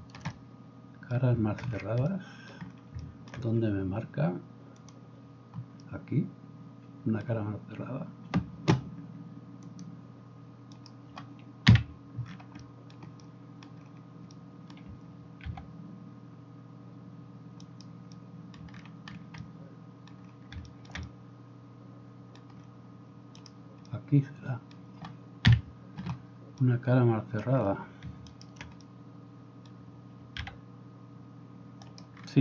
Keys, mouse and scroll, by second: 10.8 middle click, 11.6-32.4 drag, 11.6 KP_Decimal, 15.5 g, 25.5 KP_Decimal, 28.3 shift+middle click, 28.3 shift+right click, 30.4 g.